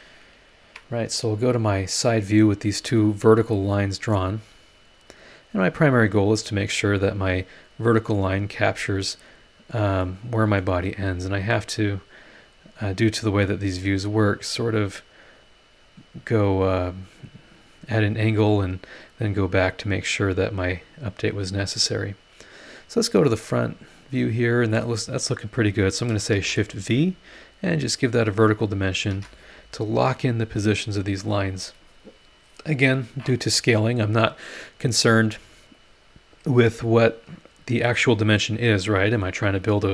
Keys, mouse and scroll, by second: 0.6 Escape, 5.5 click, 6.2 scroll down 2, 6.6 scroll up 2, 8.5 click, 9.7 click, 10.0 scroll up 2, 10.0 middle click, 10.1 click, 11.1-12.6 drag, 12.6 scroll down 1, 13.1 scroll up 1, 14.6-15.7 drag, 16.7 click, 23.5 click, 25.0 click, 26.3 shift+v, 27.6 click, 28.8 shift+click, 29.1 shift+v, 30.2 click.